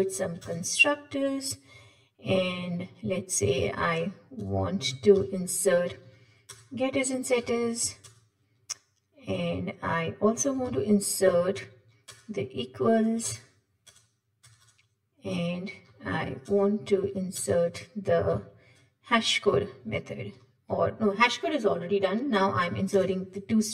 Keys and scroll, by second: 5.2 alt+Insert, 7.4 shift+Down, 10.7 alt+Insert, 18.7 alt+Insert.